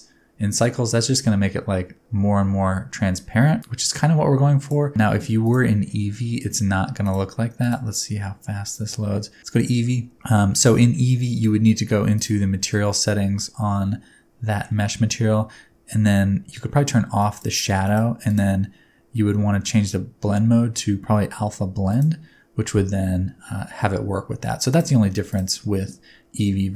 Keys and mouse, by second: 7.0-7.5 middle drag, 7.7-8.9 middle drag, 17.1 middle click, 18.3-22.1 middle drag, 24.7 middle click.